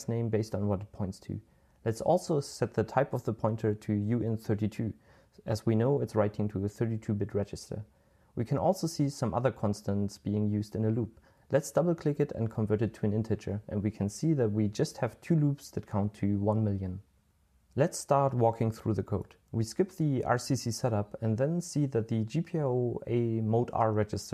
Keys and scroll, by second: 0.3 typing, 3.1-3.6 typing, 3.8 Return, 5.6 super+l, 5.9-6.5 typing, 13.0-17.4 typing.